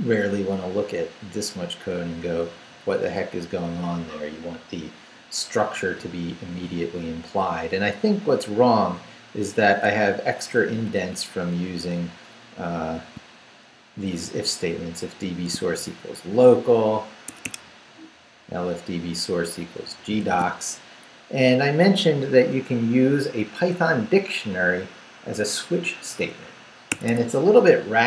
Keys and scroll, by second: 2.3 Down, 7.2 Up, 7.9 Up, 9.9 Up, 11.7 Down, 15.1 shift+v, 17.3 Escape, 17.7 Down, 19.3 Down, 19.8 Up, 20.2 shift+v, 26.9 Escape.